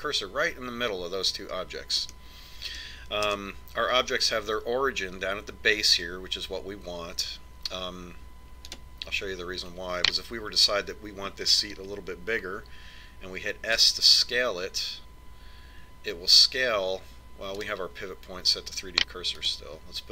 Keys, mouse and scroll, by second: 3.4-6.1 middle drag, 4.5 KP_1, 10.0 right click, 15.1 s.